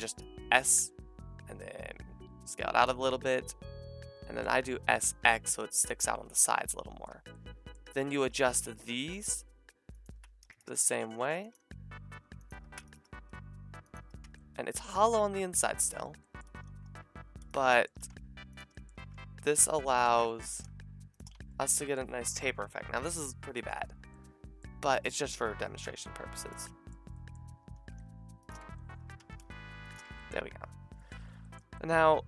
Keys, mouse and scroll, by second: 0.4 s, 2.9-5.9 middle drag, 4.7 s, 6.0 Tab, 7.1 Tab, 7.8-11.5 typing, 8.0 alt+shift+click, 12.6 a, 13.2 s, 14.2 Tab, 15.9 Tab, 16.4 a, 16.7 w, 17.0-18.2 middle drag, 17.9 s, 18.6 middle click, 18.9 a, 19.6-20.7 middle drag, 20.2 s, 21.2-24.7 middle drag, 21.3 Tab, 25.0 middle click, 25.1 Tab, 25.9 s, 27.1 middle click, 27.7 s, 28.5 click, 28.6 Tab, 29.0 Tab, 29.2 s, 30.0 Tab, 30.0-32.2 middle drag.